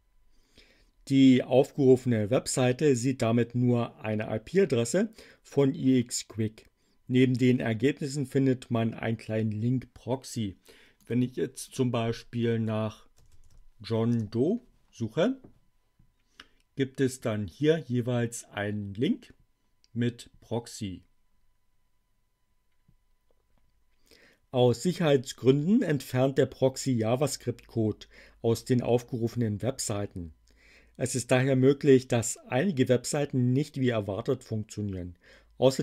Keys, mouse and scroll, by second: 10.9 click, 11.6 click, 12.4-14.0 typing, 14.1 Return.